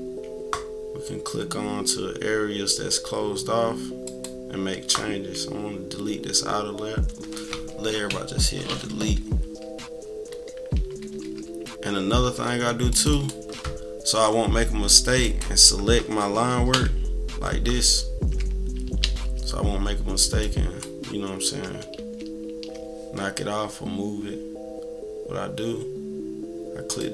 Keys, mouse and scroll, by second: 4.0 click, 8.1 Delete, 10.2-12.2 typing, 12.9 click, 13.1 click, 15.2 click, 16.7 Delete, 19.0 ctrl+z, 20.4-21.6 drag, 22.0 ctrl+z, 26.9 click.